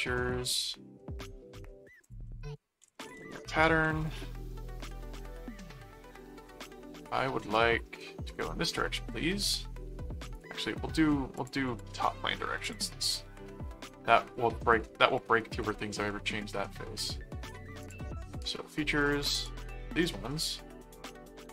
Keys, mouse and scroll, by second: 0.2 right click, 0.8-1.8 middle drag, 2.0 click, 2.3-4.4 typing, 5.1 Return, 6.4 middle click, 7.6 middle click, 8.3 click, 8.8 middle click, 9.6 middle click, 10.3 click, 11.3 click, 12.6 click, 13.5-14.5 middle drag, 14.9 middle click, 16.1 middle click, 17.8 click, 18.7 middle click, 19.3 click, 20.1 middle click.